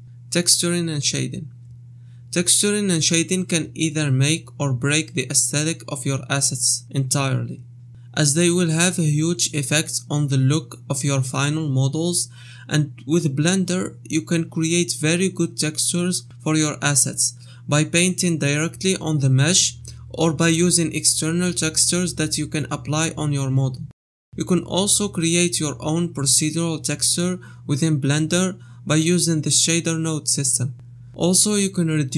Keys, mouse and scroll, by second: 3.2 click, 3.2 middle click, 3.4 s, 3.6 click, 3.6 middle click, 3.8 click, 3.8 middle click, 4.0 click, 4.2 click, 4.2 scroll down 1, 4.2 middle click, 4.4 ctrl+z, 4.5 click, 4.6 click, 4.8 click, 5.0 click, 5.0 middle click, 5.2 middle click, 5.2 s, 5.4 click, 5.4 middle click, 5.7 middle click, 5.7 scroll down 5, 5.8 shift+middle click, 5.9 middle click, 5.9 s, 6.0 click, 6.2 click, 6.6 middle click, 6.8 middle click, 6.8 click, 7.0 click, 7.0 s, 7.2 click, 7.2 middle click, 7.6 click, 7.8 middle click, 8.0 s, 8.2 click, 8.2 middle click, 8.4 click, 8.5 scroll up 2, 8.6 click, 8.6 s, 8.8 click, 9.0 ctrl+z, 9.0 click, 9.2 click, 9.5 shift+middle click, 9.5 scroll down 4, 9.6 KP_1, 9.8-10.2 click, 10.4 click, 10.6 click, 10.8 click, 11.3 scroll down 5, 11.6 click, 12.0 click, 12.5 click, 12.6 click, 12.6 middle click, 12.6 scroll down 4, 12.9 click, 13.0 middle click, 13.1 click, 13.1 shift+middle click, 13.1 scroll up 1, 13.1 shift+s, 13.3 ctrl+z, 13.3 click, 13.5 ctrl+z, 13.7 click, 14.1 click, 14.3 ctrl+z, 14.3 click, 14.5 click, 14.7 middle click, 14.7 click, 14.9 ctrl+z, 14.9 click, 15.2 click, 15.2 middle click, 15.3 click, 15.5 click, 15.5 middle click, 16.1 middle click, 16.1 click, 16.3 click, 16.4 middle click, 16.4-16.8 scroll down 3, 16.5 click, 16.7 click, 16.8 middle click, 16.8 click, 16.8 scroll up 2, 17.1 click, 17.5 click, 17.9 middle click, 17.9-18.3 scroll down 6, 18.1 click, 18.3 click, 18.4 click, 18.6 click, 18.8 ctrl+z, 19.0 click, 19.3 click, 19.3 scroll down 6, 19.4 middle click, 19.4 scroll up 6, 19.7 click, 20.3 click, 20.7 middle click, 20.8 middle click, 20.8 scroll down 3, 21.0 click, 21.2-22.8 click, 21.4 scroll down 1, 21.5 middle click, 21.5 scroll up 5, 21.9 ctrl+s, 22.1 click, 22.6 click, 22.8 scroll down 1, 23.0 click, 23.2 middle click, 23.6 click, 23.8 click, 24.0 click, 24.0 middle click, 24.2 click, 24.4 click, 24.4 middle click, 25.2 middle click, 25.4 click, 25.6 middle click, 25.7 shift+middle click, 26.2 middle click, 26.2 click.